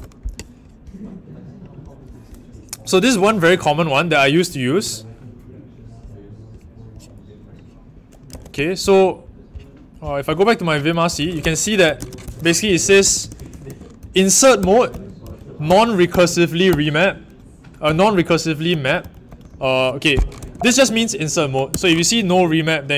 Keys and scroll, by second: 0.0-0.2 typing, 8.2 super+c, 10.8-20.9 typing, 12.2 Escape.